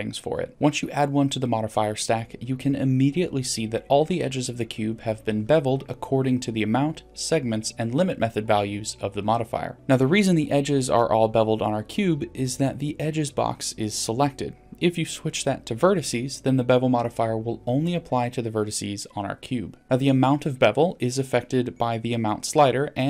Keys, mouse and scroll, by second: 0.7 middle click, 5.4-5.8 middle drag, 15.6 click, 16.4 middle click, 17.7 scroll up 2, 18.2 middle click, 20.1 click.